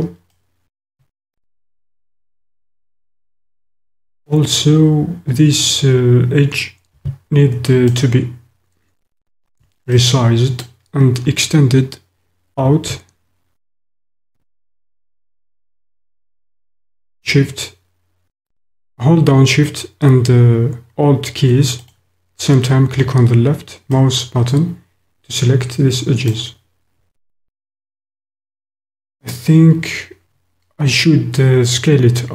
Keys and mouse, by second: 0.3 click, 0.5-2.0 middle drag, 2.1-4.1 drag, 7.8 alt+click, 10.0 click, 24.0-26.0 middle drag, 26.0 click.